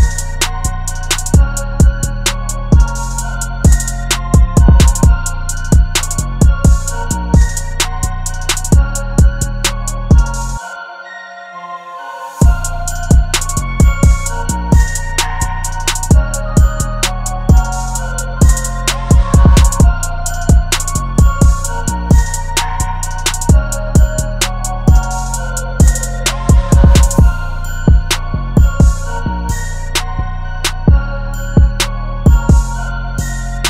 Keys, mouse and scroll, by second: 19.3 double click, 21.5 alt+click, 24.3 double click, 29.7 double click.